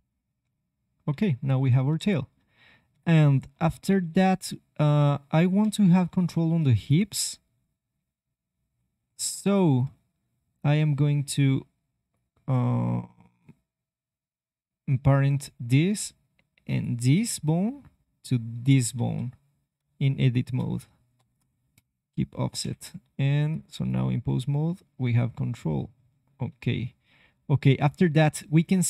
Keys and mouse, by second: 0.4 g, 2.9 KP_1, 5.5 KP_3, 6.7-8.1 drag, 7.9 g, 8.3 click, 9.6 middle click, 9.9 middle click, 10.1 middle click, 12.0 click, 14.1 middle click, 16.6-18.7 middle drag, 18.9 Tab, 20.2-22.5 drag, 21.1 ctrl+p, 22.5 KP_3, 23.0 ctrl+Tab, 23.8 click, 24.2 g.